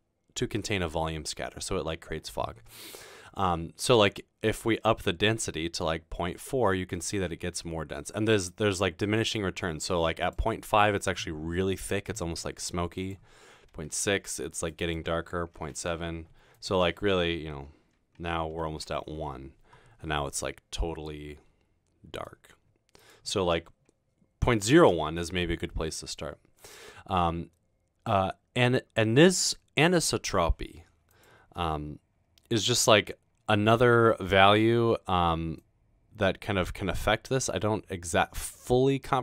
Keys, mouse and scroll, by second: 4.1-9.4 drag, 13.0 click, 13.6-14.3 typing, 14.9 click, 15.5-16.2 typing, 18.6-19.4 typing, 21.5 typing, 23.0 click, 24.4-25.2 typing, 28.5 typing, 31.1 click, 35.6-39.2 drag.